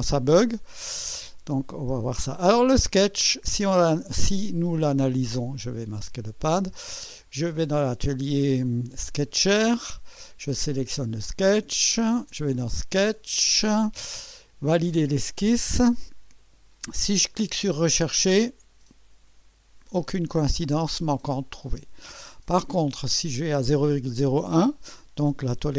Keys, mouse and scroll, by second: 1.1 click, 1.8 space, 2.7-3.9 drag, 5.7 click, 6.0 space, 7.6 click, 9.2 click, 10.6 click, 12.6 click, 15.1 click, 17.7 click, 21.6 click, 22.9-23.5 scroll down 3.